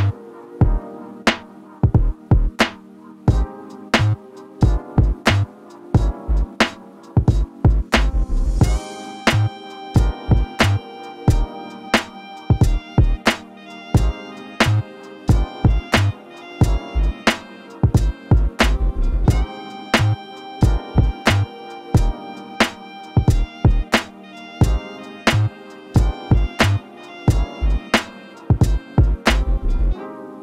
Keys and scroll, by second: 4.9 ctrl+s, 23.7 ctrl+space.